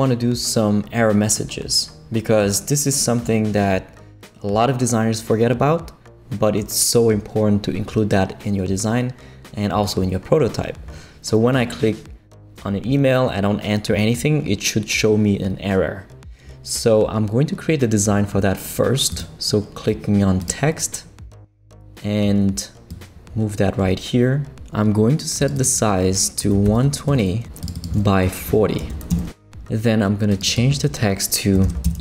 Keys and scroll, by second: 26.3-27.3 typing, 28.5 4, 28.8 0, 29.1 Return, 31.4-32.0 typing.